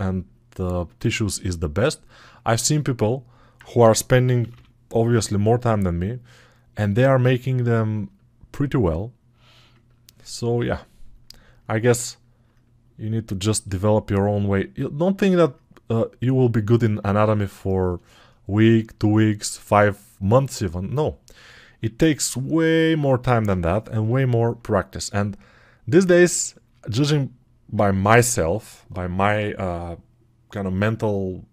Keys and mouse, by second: 27.6-31.5 drag, 27.6-31.5 middle drag, 27.6-31.5 right drag.